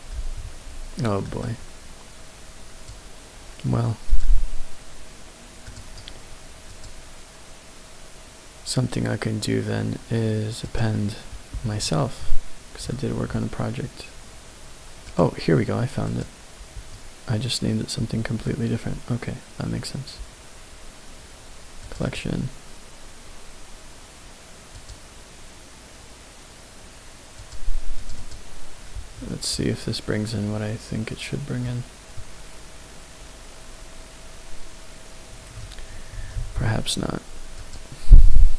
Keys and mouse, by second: 5.7 click, 6.7-10.9 drag, 29.5-31.6 middle drag, 32.1-35.6 middle drag, 37.3 ctrl+z, 37.5-38.5 drag.